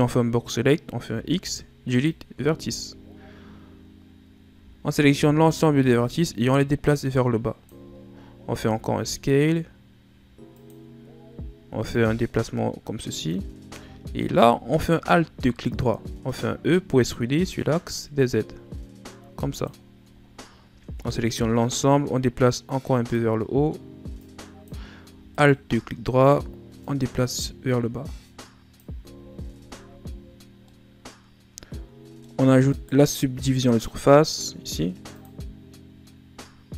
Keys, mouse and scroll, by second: 1.0 x, 2.8-4.5 shift+scroll up 4, 4.5 a, 4.9 a, 5.1 a, 6.0-7.9 drag, 7.9 shift+scroll down 4, 8.5 s, 11.9-14.2 drag, 14.2 alt+right click, 14.9-15.5 shift+scroll down 4, 15.6-16.5 scroll up 1, 16.5 e, 19.8 scroll down 2, 20.2-20.7 shift+scroll up 4, 20.7 a, 21.0 a, 21.7-25.3 drag, 25.3 alt+right click, 26.8-28.9 drag, 28.9 z, 29.5 Tab, 29.9 a, 30.2 scroll down 2, 30.6-32.3 middle drag, 32.3-32.7 scroll up 1, 32.7 right click, 33.8 click, 35.2-36.7 drag.